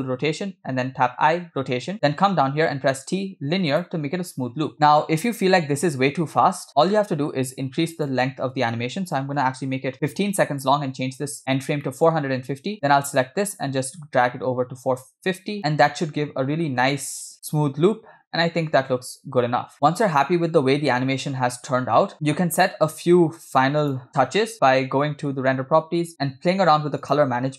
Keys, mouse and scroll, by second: 0.8 i, 2.7 t, 4.5 space, 6.7 space, 8.0-10.7 drag, 11.6 scroll down 2, 11.8 middle click, 12.8 click, 13.7 g, 15.7 space, 16.9 space, 17.4 space, 18.9 space, 19.3 space, 19.8-21.3 shift+middle drag, 19.8 shift+space, 22.0 space, 22.2 space, 23.9 click, 26.3-26.7 scroll down 5, 27.1 click.